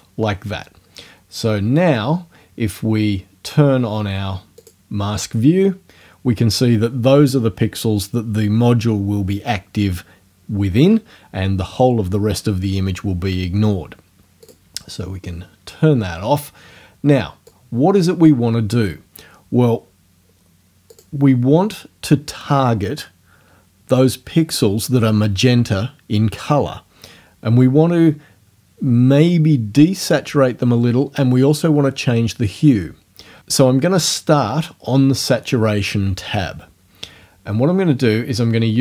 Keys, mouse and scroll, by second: 2.5-3.0 scroll down 2, 4.6 click, 14.5 click, 17.5 click, 20.9 click.